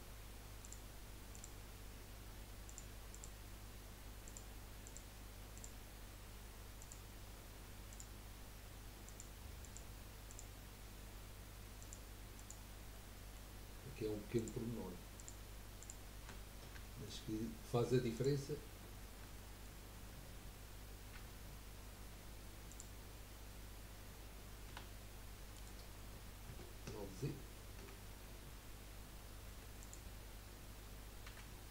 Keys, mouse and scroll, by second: 0.6 shift+click, 1.3 shift+click, 2.7 shift+click, 3.1 shift+click, 4.2 shift+click, 4.8 shift+click, 5.5 shift+click, 6.8 shift+click, 7.9 shift+click, 9.0 shift+click, 9.6 shift+click, 10.3 shift+click, 11.8 shift+click, 12.3 shift+click, 12.9-14.3 shift+middle drag, 14.3 shift+click, 15.2 shift+click, 15.9 shift+click, 16.4-16.7 scroll up 2, 16.9-18.1 shift+middle drag, 18.1 shift+click, 18.7-19.3 shift+scroll down 3, 19.3-21.1 shift+middle drag, 21.1 u, 23.1-23.8 scroll down 2, 24.7 e, 27.2 ctrl+z, 29.5 3, 29.9 click, 31.3 l.